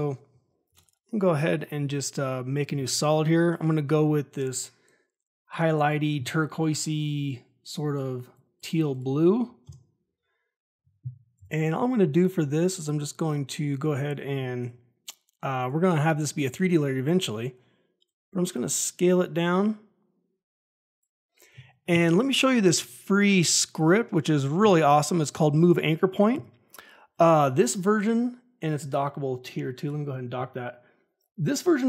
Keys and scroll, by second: 0.6 ctrl+y, 9.6 Return, 11.3 s, 14.5 F4.